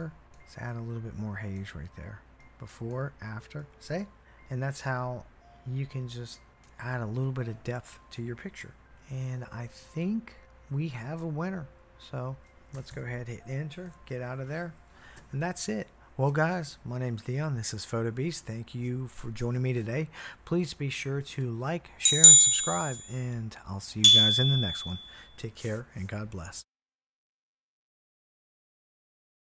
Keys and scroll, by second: 12.7 Return, 12.9 Return.